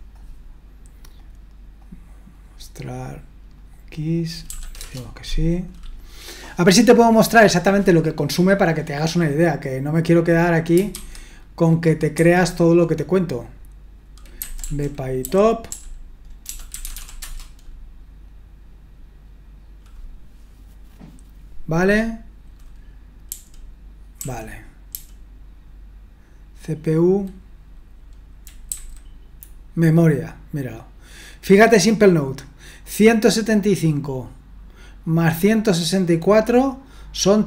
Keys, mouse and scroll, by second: 4.1 click, 4.5 s, 4.8 Return, 11.0 super+1, 12.2 super+2, 14.2-17.4 typing, 23.3-24.9 typing, 28.7 Left.